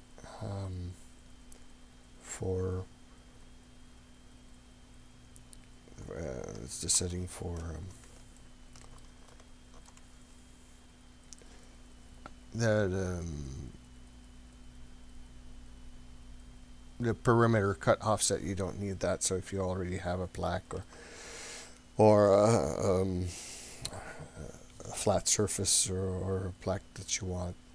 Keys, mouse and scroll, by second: 6.0-6.3 scroll up 3, 6.5 scroll down 2, 8.4 ctrl+middle click, 9.3 shift+middle click, 10.1-10.6 scroll up 4, 18.0-19.2 scroll down 4, 19.4 scroll up 2, 19.9 scroll down 1, 20.9 ctrl+middle click, 21.5-22.2 shift+middle drag, 22.4-23.0 scroll up 4, 23.2 scroll down 2.